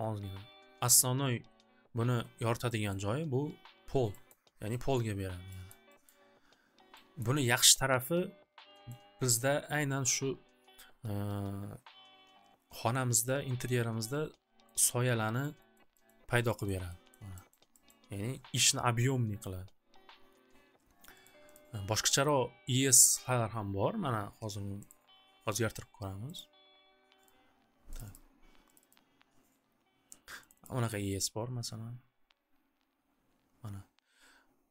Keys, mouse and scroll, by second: 2.8 middle click, 4.2 scroll, 5.0 middle click, 5.7 middle click, 6.1 middle click, 6.1 scroll, 7.1 scroll, 8.8 middle click, 10.0 scroll, 11.8 scroll, 14.9 middle click, 15.5 middle click, 15.7 middle click, 15.9 scroll, 16.1 middle click, 16.7 middle click, 17.1 middle click, 17.3-18.0 scroll, 17.5 middle click, 21.2 click, 21.6 click, 24.8 click, 26.3 click, 27.3 click, 28.0 click, 28.1 click, 28.8 click, 28.9 click, 30.4 click, 30.6 click.